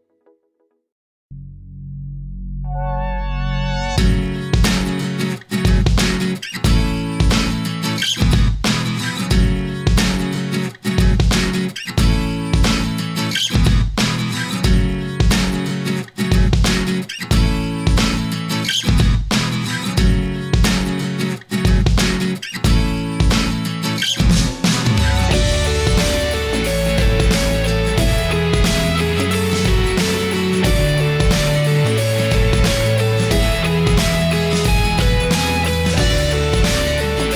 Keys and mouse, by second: 7.0-8.8 middle drag, 9.5-11.7 middle drag, 14.4-15.2 shift+middle drag, 20.1 click, 20.5 click, 22.0-23.4 middle drag, 25.4 shift+a, 34.3 KP_1, 35.4-36.6 middle drag.